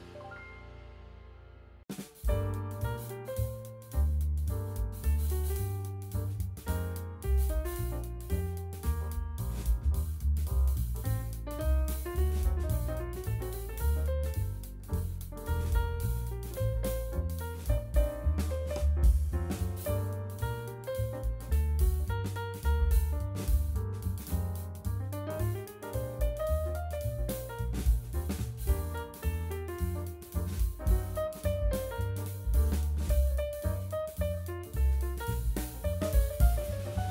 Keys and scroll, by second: 6.1 v, 16.9 space.